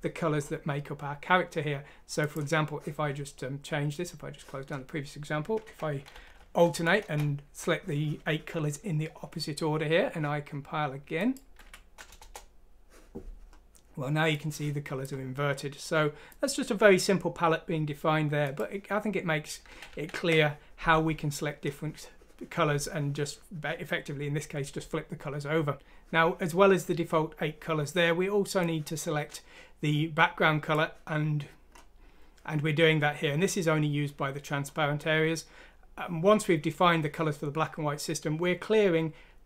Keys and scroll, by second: 6.3 ;, 11.6 F6, 12.1 Return, 19.7 ctrl+z, 19.9 ctrl+z.